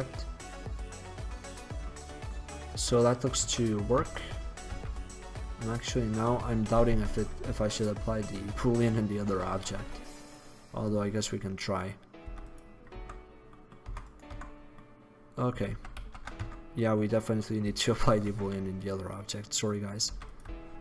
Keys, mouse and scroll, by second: 0.7-1.7 middle drag, 2.1-2.4 middle drag, 3.4 middle click, 3.6 Tab, 4.1 Tab, 4.7 z, 11.8 right click, 12.3 x, 13.1 Tab, 14.0 Tab, 14.4 Tab, 15.8 ctrl+z, 16.1 ctrl+z, 16.6 Tab, 18.2 shift+a, 20.2 x.